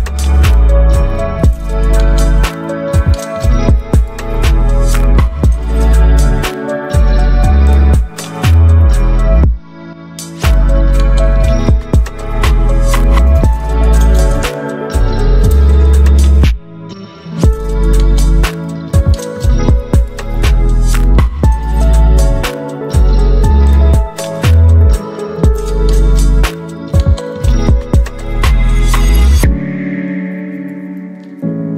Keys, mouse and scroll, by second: 10.3 ctrl+t, 12.0-14.5 drag, 16.6 ctrl+t, 18.5-21.7 alt+drag, 23.5-26.6 shift+drag, 26.6 Up, 29.2 click.